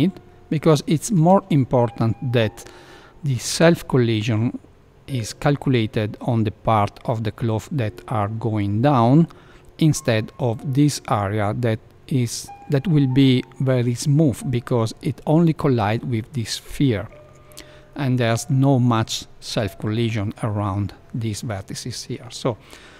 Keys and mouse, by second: 0.9 shift+middle click.